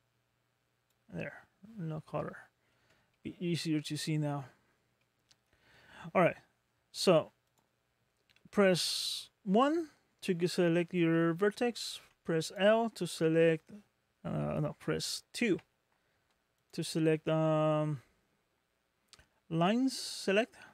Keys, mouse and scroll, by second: 2.1 scroll down 1, 2.3 middle click, 3.1 shift+middle click, 3.9 scroll up 3, 4.6-5.0 scroll up 1, 5.0 middle click, 7.5 click, 11.9 3, 12.5 click, 12.5 3, 15.4 2, 16.6 click.